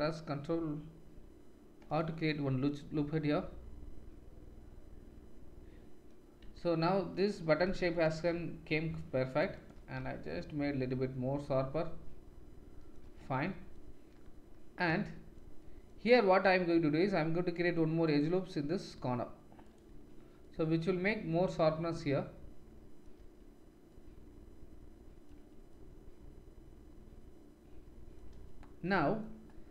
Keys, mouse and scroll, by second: 2.4 Tab, 6.3 Tab, 8.6 ctrl+r, 10.0 Tab, 11.0 click, 11.7-12.9 drag, 13.0 Tab, 13.6-16.2 drag, 13.7 middle click, 16.5 ctrl+r, 19.9 Tab, 20.7 click, 20.9-21.2 drag, 22.8 click, 23.1 Tab, 25.3 Tab, 27.9-29.7 drag, 28.2 Tab.